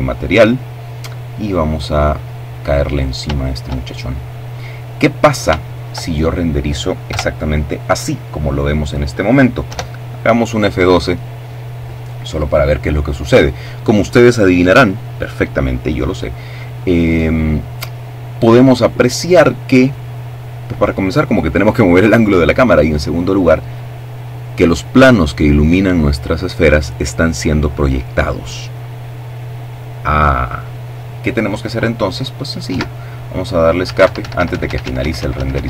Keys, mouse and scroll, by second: 0.5 click, 2.1-3.7 shift+middle drag, 3.7-4.6 scroll down 4, 4.1 shift+middle click, 4.6 shift+middle click, 5.6 KP_0, 8.2 F12, 31.1 Escape, 32.3 Escape.